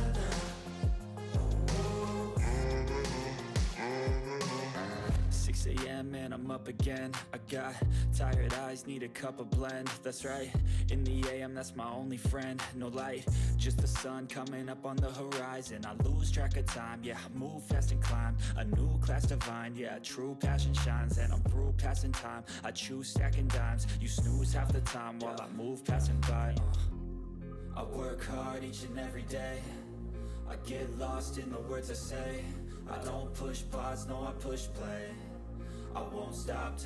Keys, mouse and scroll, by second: 2.9 click, 4.0 8, 4.3 ctrl+s, 5.2 click, 8.2 click, 9.3 ctrl+c, 10.5 click, 10.9 space, 11.5 ctrl+v, 12.2 ctrl+s, 14.4 click, 15.0-18.1 typing, 18.7 click, 19.0 ctrl+s, 20.2 click, 22.4 click, 23.3 ctrl+c, 23.9 click, 24.6 Return, 25.0 ctrl+v, 27.2 click, 28.2 ctrl+x, 28.6 click, 29.1 Return, 29.4 ctrl+v, 31.1 ctrl+v, 31.1 click, 32.8 ctrl+s, 33.4 click, 34.0-34.8 scroll up 1, 35.3 click.